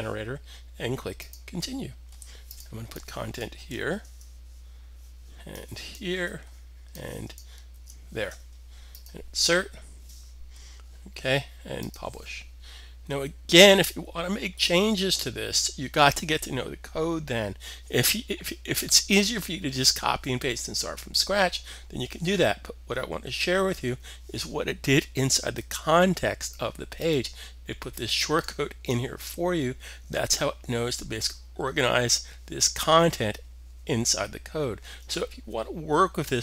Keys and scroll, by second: 3.8 super+v, 6.0 super+v, 7.6 super+v.